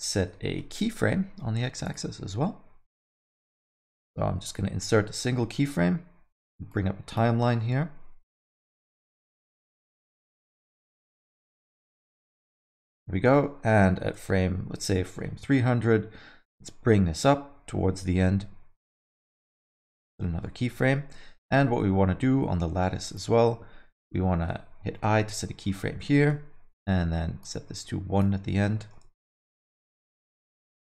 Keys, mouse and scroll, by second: 0.6 n, 1.8 click, 3.8 right click, 4.8 middle click, 5.0 scroll down 3, 5.2 middle click, 6.7 click, 8.1 shift+F12, 8.2 shift+F12, 10.9 click, 13.3 middle click, 14.0 shift+Right, 15.0 middle click, 16.4 click, 20.3 i, 21.1 shift+Left, 23.0 click, 25.1 i, 26.1 shift+Right, 27.4 click, 29.2 shift+Right, 30.5 click.